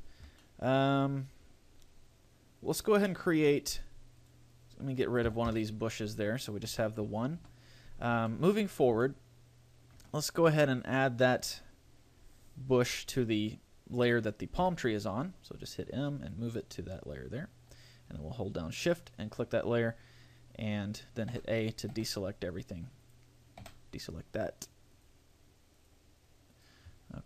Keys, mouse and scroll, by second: 0.1-0.5 scroll down 3, 0.7 shift+middle click, 1.2-1.5 scroll up 2, 4.5 right click, 5.5 Delete, 6.9 KP_1, 7.3 KP_5, 7.5 KP_5, 8.2-8.5 scroll down 2, 8.5 shift+middle click, 8.9-9.2 scroll up 3, 9.2 shift+middle click, 11.1 right click, 14.9 m, 19.1 shift+click, 21.5 a, 22.2 a, 23.3 click, 23.9 a, 25.1 click, 26.0 click, 26.7 click, 27.1 scroll down 7.